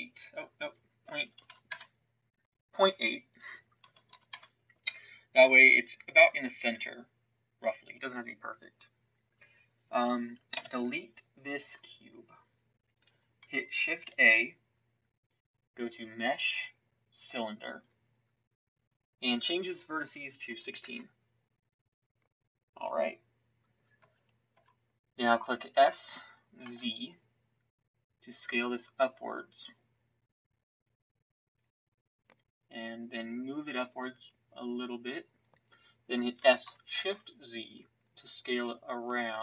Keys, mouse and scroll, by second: 10.5 Delete, 14.0 shift+a, 23.9 Tab, 24.5 Tab, 25.8 s.